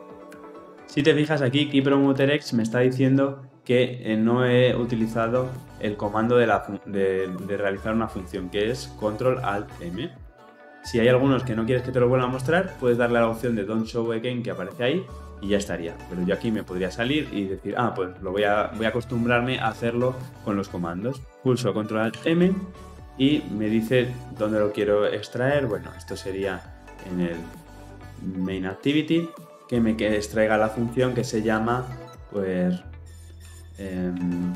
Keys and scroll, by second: 0.1 ctrl+alt+m, 21.2 ctrl+alt+shift+m.